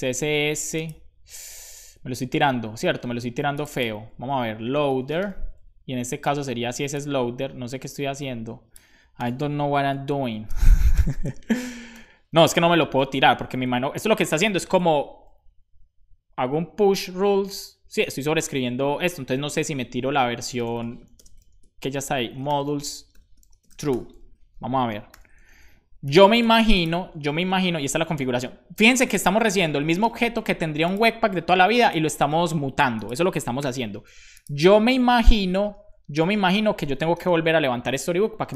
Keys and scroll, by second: 4.3-5.6 typing, 9.2 BackSpace, 9.5 super+Right, 10.2 shift+Left, 12.6 super+Right, 18.9 BackSpace, 20.1-24.3 typing, 21.5 Return, 25.4 super+s, 28.1 super+s, 28.6 BackSpace, 29.2 super+Return, 30.1 super+s, 33.6 super+j, 35.1 super+Right, 36.4 ctrl+c, 37.1 Return.